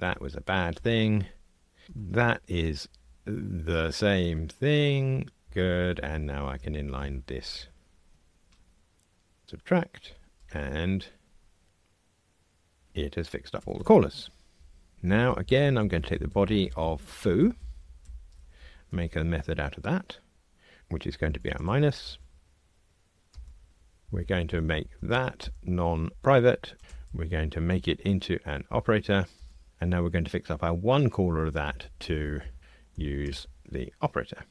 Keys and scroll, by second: 0.0 Delete, 1.8 ctrl+r, 9.4 alt+super+n, 18.9 alt+super+m, 25.4 alt+Return, 27.6 alt+Return, 33.2 alt+Return.